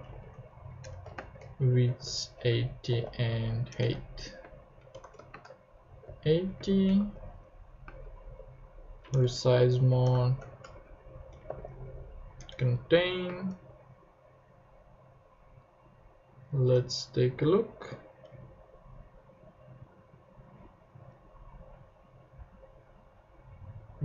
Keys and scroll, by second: 0.0-6.6 typing, 3.7 Return, 6.9 super+Right, 7.8 super+space, 8.2 r, 9.1 Return, 10.0-12.0 typing, 12.4 Return, 12.8 super+Right, 13.2 super+space, 13.3 /, 16.7 super+Tab, 17.3 super+Right.